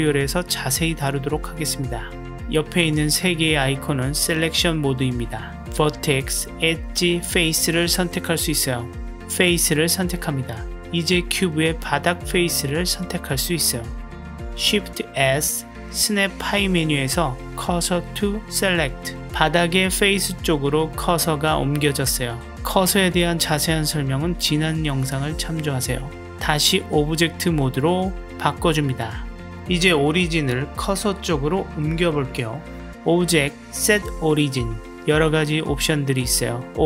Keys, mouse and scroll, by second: 3.3 click, 5.3 click, 7.3 click, 9.8 middle click, 12.4-13.7 middle drag, 14.6 shift+s, 20.0-22.0 middle drag, 22.3-25.2 middle drag, 27.7 click, 33.3-36.8 drag.